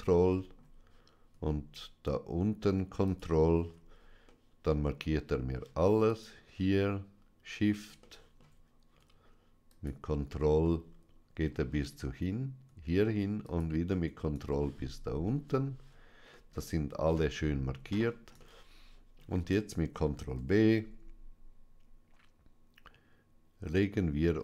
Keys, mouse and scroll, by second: 0.3 shift+middle click, 3.0 ctrl+click, 4.1 middle click, 6.0 shift+click, 8.0 shift+middle click, 10.5 middle click, 13.3 ctrl+click, 14.5 shift+middle click, 16.2 shift+middle click, 18.4-19.6 shift+middle drag, 20.2 ctrl+b.